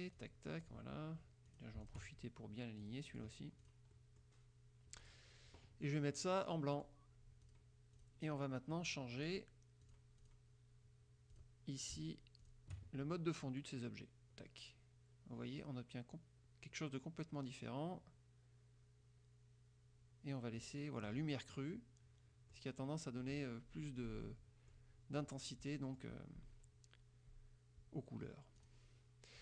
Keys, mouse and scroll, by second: 0.3 click, 0.7 click, 1.6 click, 1.9 shift+click, 2.9 click, 3.8 click, 4.1 click, 5.2 click, 6.9 click, 7.6 click, 8.1 click, 10.0 click, 10.3 click, 11.5 click, 12.5 shift+click, 14.3 scroll down 2, 15.1 scroll down 2, 15.7 scroll down 2, 16.3 scroll down 2, 16.9 scroll down 2, 17.7 scroll down 2, 18.4 scroll down 2, 19.1 scroll down 2, 21.1 click, 21.5-22.9 drag, 24.4 click, 25.3 click.